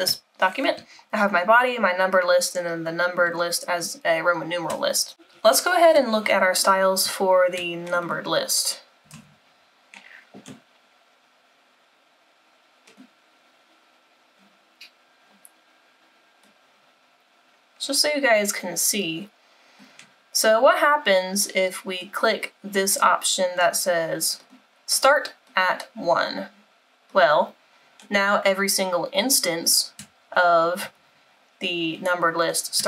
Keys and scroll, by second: 9.3 super+-.